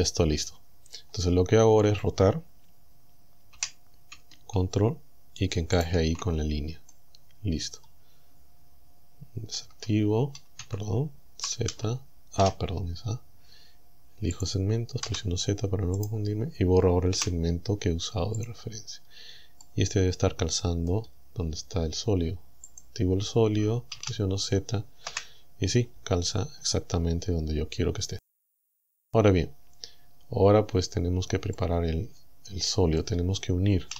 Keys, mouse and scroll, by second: 0.3 scroll up 2, 3.6 r, 5.8 ctrl+click, 6.9-8.0 drag, 9.6 Tab, 10.7 Tab, 12.4 a, 13.0-13.4 scroll up 2, 14.4 click, 15.1 z, 16.0 right click, 17.2 Delete, 18.4 click, 18.9-19.6 scroll down 1, 19.6-21.1 middle drag, 22.7 click, 24.0 z, 25.1 KP_1, 26.3-26.7 scroll up 2, 28.5-28.8 scroll down 2, 31.6-33.2 drag.